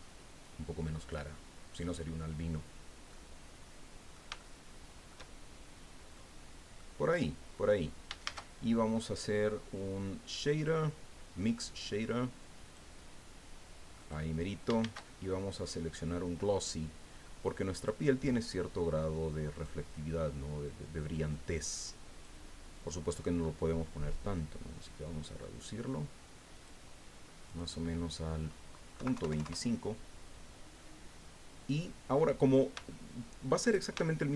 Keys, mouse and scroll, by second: 2.4 scroll down 1, 3.1-4.3 drag, 4.4 shift+click, 6.1 click, 8.2 shift+a, 12.6 click, 14.0 click, 14.8 shift+a, 17.8 click, 19.6 click, 21.3-22.4 drag, 24.3-26.8 drag, 27.5 click, 29.0 KP_Decimal, 29.2 KP_2, 29.3 KP_5, 29.4 KP_Enter, 32.4-32.9 scroll down 3, 32.9 shift+click, 34.0 shift+click.